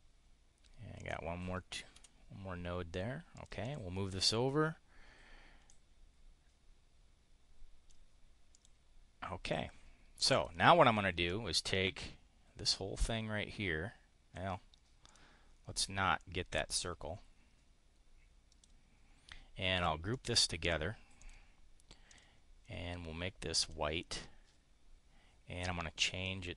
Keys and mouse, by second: 0.9 click, 1.9 Delete, 3.3 click, 5.7-8.0 drag, 8.5 click, 9.4 click, 10.3 click, 11.3-14.7 drag, 16.2-18.6 drag, 20.2 click, 21.1 click, 21.9 click, 23.6 click, 26.2 click.